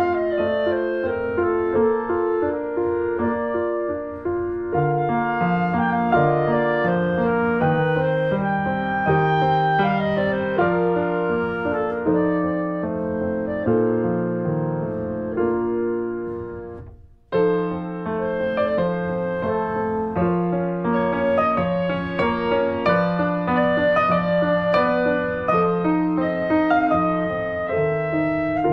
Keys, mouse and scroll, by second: 0.3 middle click, 0.6 s, 4.5 click, 4.6 middle click, 5.0 click, 5.2 middle click, 5.7-6.0 scroll up 1, 6.0-8.0 middle drag, 8.0-8.4 scroll down 2, 8.4 /, 8.9 middle click, 9.4 click, 9.6 scroll down 1, 10.5 shift+click, 10.7 right click, 11.3 click, 11.6 click, 12.0 alt+middle click, 12.4 alt+middle click, 13.0 shift+middle click, 13.6 shift+click, 14.1 click, 14.4 shift+right click, 15.0 alt+middle click, 15.5 scroll up 1, 15.6 middle click, 16.7 right click, 16.8-17.2 scroll down 1, 17.3 middle click, 17.7-18.0 scroll down 1, 18.0 shift+middle click, 18.8 scroll down 1, 19.0 alt+middle click, 20.0 click, 22.1-23.5 shift+middle drag, 23.5 shift+a, 25.2 click, 25.8 click, 26.9 alt+middle click, 27.6 scroll up 1, 28.0 shift+middle click, 28.2-28.7 shift+scroll up 2.